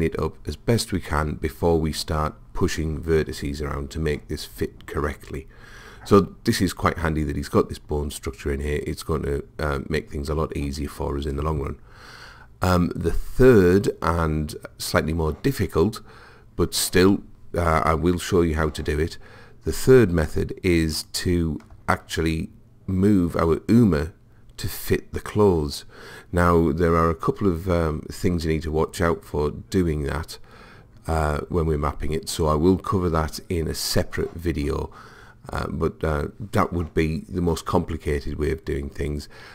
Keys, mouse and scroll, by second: 21.1 click.